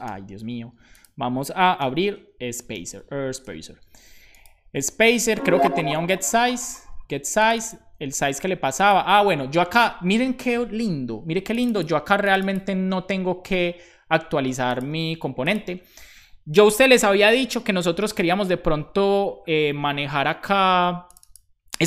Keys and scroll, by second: 0.1 super+j, 1.8 super+p, 2.1-3.4 typing.